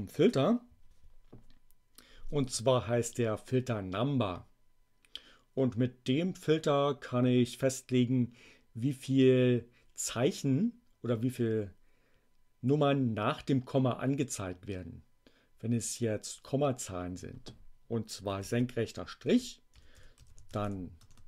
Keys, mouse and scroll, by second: 2.2 space, 18.4 alt+<, 19.1-21.2 typing.